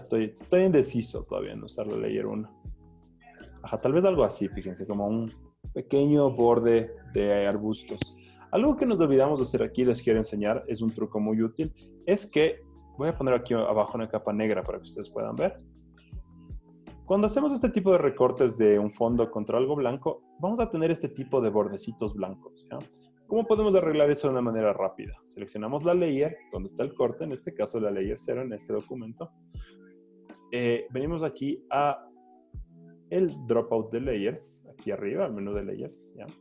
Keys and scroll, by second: 12.0 super+d, 16.1 super+BackSpace, 16.6 z, 20.5 z, 22.2 z.